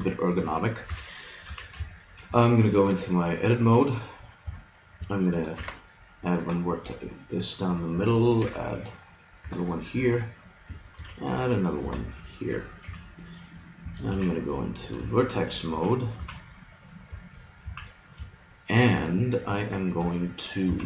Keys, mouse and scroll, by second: 0.9 KP_1, 1.5 z, 1.9-4.0 middle drag, 4.5 Tab, 5.5 ctrl+r, 8.4 ctrl+r, 10.9 ctrl+r, 12.9 a, 14.1 ctrl+Tab, 15.1-16.9 drag, 15.7 z, 16.2 z, 17.6 z, 20.1 KP_1, 20.7 z.